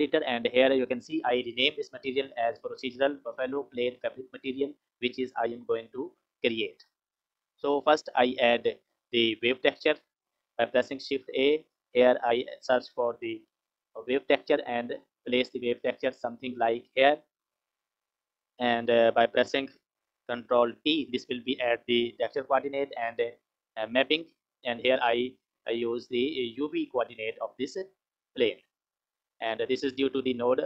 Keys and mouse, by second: 7.4 click, 10.1 click, 10.9 shift+a, 17.4 click, 17.7 click, 20.6 ctrl+t, 21.6 click, 23.3 click, 25.7-27.5 drag.